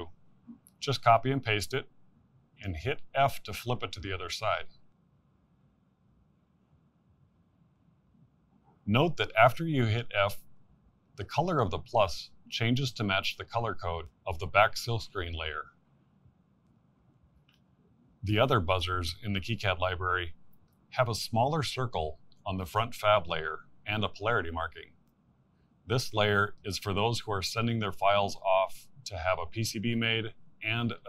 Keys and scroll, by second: 0.5 c, 3.7 ctrl+v.